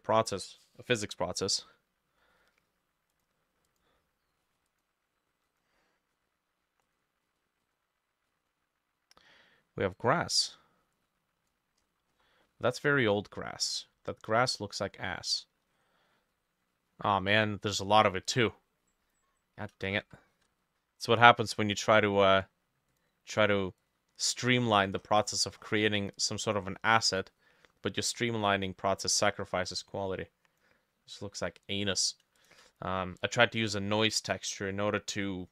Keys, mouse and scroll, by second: 7.3 double click, 7.7 double click, 11.8-12.5 scroll up 11, 12.5 middle click, 13.2-13.9 scroll down 3, 15.7-16.9 scroll down 7, 20.1 ctrl+z, 20.4 ctrl+z, 21.9 right click, 23.4 double click, 25.0-25.9 scroll up 14, 32.4 shift+click.